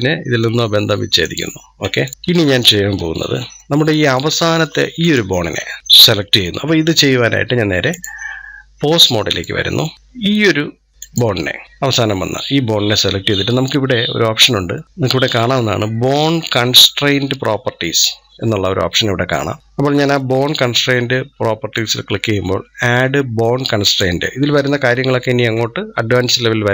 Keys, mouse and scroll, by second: 1.1-2.1 drag, 2.1-2.8 scroll down 4, 2.8 scroll up 1, 3.4-4.8 shift+middle drag, 4.8-9.9 drag, 10.9 click, 21.6-22.0 drag.